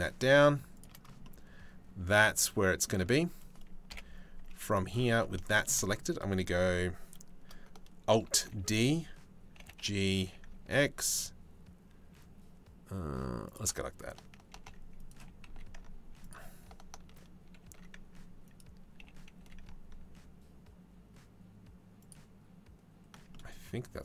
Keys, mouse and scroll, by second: 1.1-2.4 drag, 3.5 KP_7, 4.0 z, 7.9 alt+d, 9.2 g, 14.1 alt+d, 14.8 g, 17.2 alt+d, 18.6 g, 22.9 middle click.